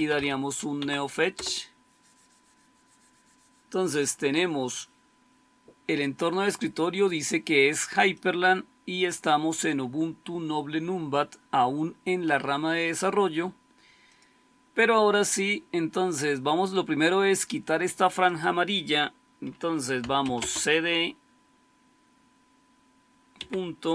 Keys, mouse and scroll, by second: 0.0-0.6 typing, 0.7 Tab, 1.2 Return, 19.7-20.6 typing, 23.2 typing.